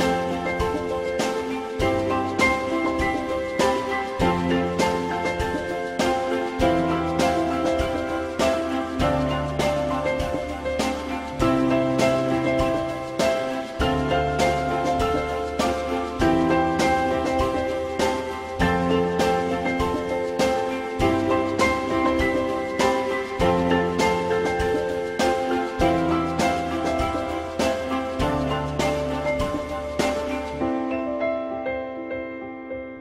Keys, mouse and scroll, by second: 0.2 alt+middle click, 7.7 F4, 8.1 alt+middle click, 13.6 alt+middle click, 19.6 alt+middle click, 20.2 middle click, 24.5 alt+middle click, 25.6 middle click, 30.9 alt+middle click, 32.5 ctrl+s.